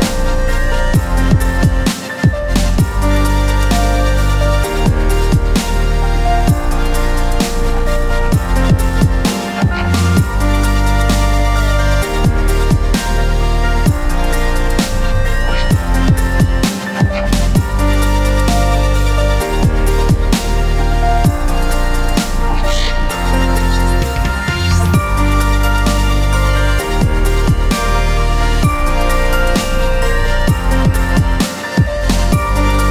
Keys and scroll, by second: 4.8 j, 18.2 space, 19.4 alt+space, 21.5 b, 25.0 ctrl+i, 25.7 ctrl+space, 28.9 j.